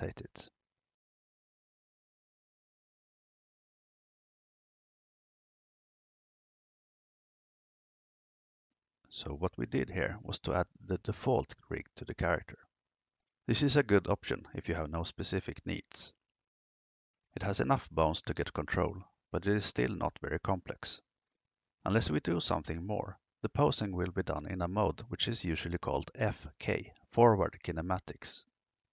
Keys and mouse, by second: 0.7 r.